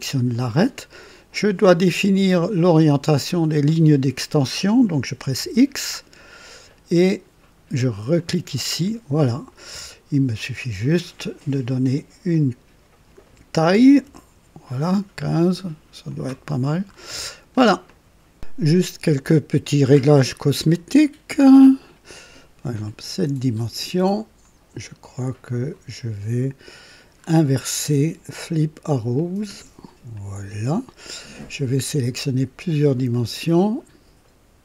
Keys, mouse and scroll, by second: 0.3 click, 1.7-3.0 drag, 5.4 x, 8.1 click, 10.7 click, 12.3 click, 13.7 KP_1, 14.0 KP_5, 16.0 click, 16.4 typing, 16.9 scroll up 1, 17.3 scroll down 1, 17.9 click, 18.1 typing, 18.6-20.8 drag, 22.8 click, 25.1 click, 27.1 scroll down 2, 29.1 click, 30.1 click, 31.2-31.8 drag, 33.3 ctrl+click.